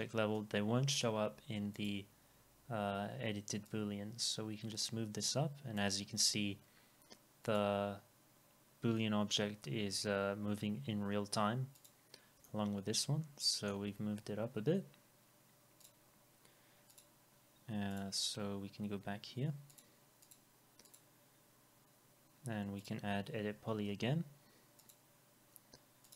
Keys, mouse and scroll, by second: 23.9 e.